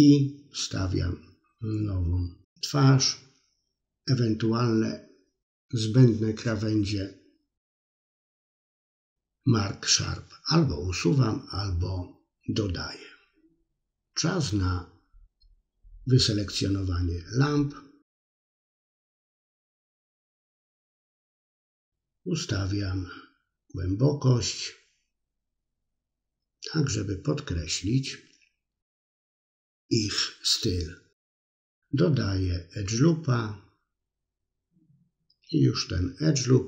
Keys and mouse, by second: 0.4-1.5 drag, 1.6 middle click, 2.9 middle click, 4.5 ctrl+e, 5.9 middle click, 6.6-7.7 middle drag, 7.8-9.5 drag, 9.8 shift+click, 10.1 middle click, 10.5 shift+click, 11.1-12.9 middle drag, 13.9 middle click, 14.5 i, 14.8 middle click, 15.5 click, 16.6 middle click, 17.4-18.8 drag, 19.0 middle click, 19.3 middle click, 20.7-21.8 drag, 22.0 middle click, 22.9-24.5 drag, 23.2 BackSpace, 24.7 middle click, 26.8 ctrl+z, 28.3 ctrl+e, 29.6-30.8 drag, 30.8 ctrl+r, 31.3 middle click, 31.9 ctrl+r, 32.6 middle click, 33.0 middle click, 33.5 ctrl+r, 34.0 middle click, 34.4 middle click, 34.9 ctrl+r, 35.4 middle click, 35.8 middle click, 35.9 click, 36.1 middle click.